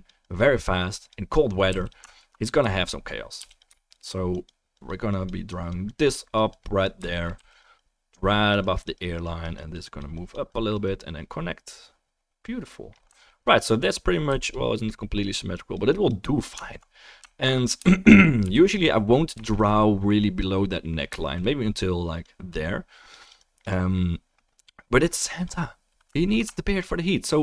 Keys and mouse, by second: 0.4-1.9 drag, 0.4-2.1 middle drag, 0.4-5.0 right drag, 1.7 f, 2.7-5.0 middle drag, 3.4 f, 4.3 click, 7.5 f, 7.6 click, 13.2-15.0 alt+middle drag, 14.3 f, 14.5-15.5 drag, 16.7 alt+middle click, 17.3 alt+click, 17.3 alt+middle click, 17.3 alt+right click, 17.6 shift+middle click, 18.4 f, 18.7-22.2 drag, 26.3 alt+middle click, 26.6 alt+click, 26.6 alt+right click, 27.1 click, 27.1 middle click, 27.1 right click.